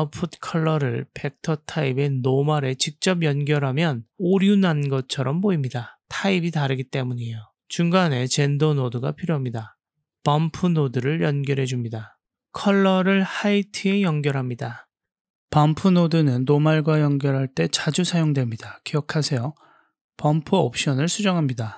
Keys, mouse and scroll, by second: 0.3-1.6 drag, 8.3 shift+a, 13.5 click, 13.8 click, 16.2 middle click, 16.9 click, 17.1 click, 17.9 click, 20.6 click.